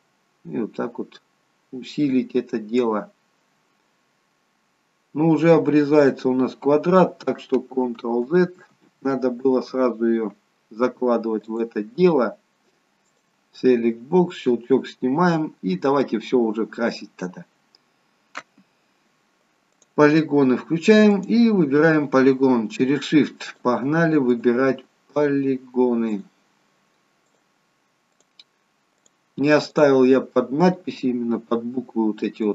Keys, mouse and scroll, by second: 2.9 click, 5.3-5.9 scroll up 2, 5.9-7.4 scroll down 2, 7.8 ctrl+z, 8.4 ctrl+z, 8.9 ctrl+z, 11.4 click, 13.7-14.3 scroll down 1, 14.3 click, 14.3-14.7 scroll down 1, 14.7-15.6 scroll up 1, 15.6-16.5 scroll down 1, 19.7 click, 23.4 click.